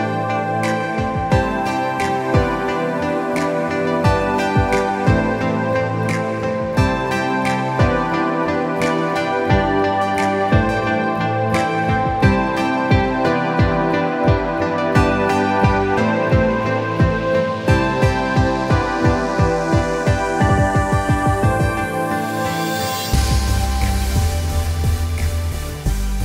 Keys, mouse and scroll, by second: 4.2 r, 15.2 click, 17.7 click, 18.8-21.4 drag, 25.2 click.